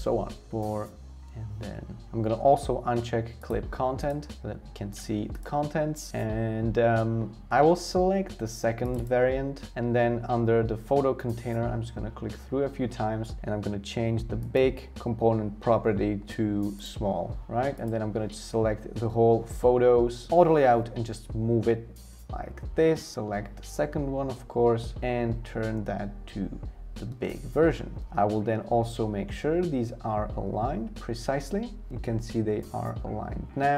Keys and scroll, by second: 0.0-0.5 typing, 20.3 shift+Left, 27.1 shift+Return, 28.0 Left, 29.9 BackSpace.